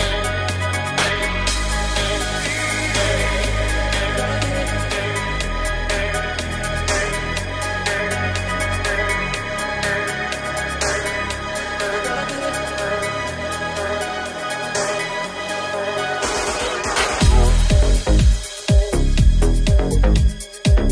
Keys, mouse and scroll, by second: 3.9 i, 7.1 Tab, 8.3 ctrl+Tab, 12.8 g, 14.2 g, 20.0 right click, 20.0 1, 20.4-20.9 shift+middle drag.